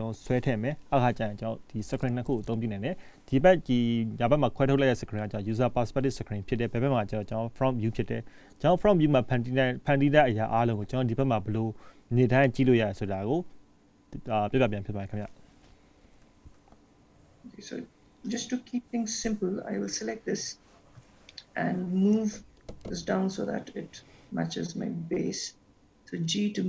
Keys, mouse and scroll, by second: 16.4-17.5 scroll up 3, 17.5 scroll down 1, 17.7 scroll up 2, 18.4 click, 18.9 scroll down 2, 19.4 scroll down 2, 19.8 scroll down 1, 20.4 scroll up 1, 21.8 shift+middle click, 26.4 g.